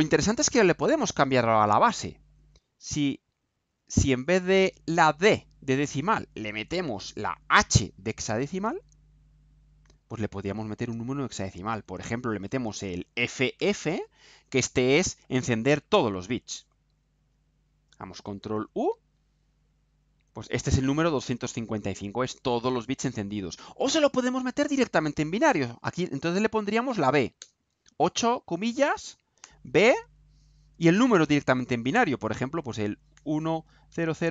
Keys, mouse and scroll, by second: 3.0-3.6 ctrl+scroll up 4, 4.2 ctrl+scroll down 2, 4.5 ctrl+right click, 7.4 click, 8.4 BackSpace, 9.8 h, 10.8 Delete, 13.2 shift+f, 16.9 ctrl+u, 25.9 Left, 26.4 Right, 26.8 BackSpace, 29.4 b, 33.1 1, 33.9 0.